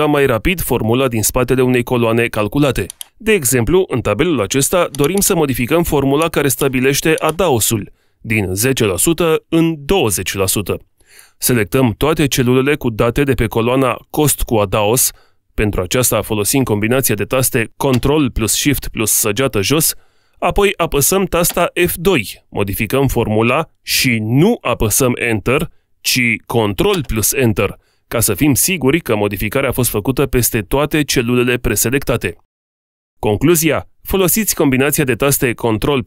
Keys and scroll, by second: 17.8 ctrl+shift+Down, 21.6 F2, 26.2 ctrl+Return.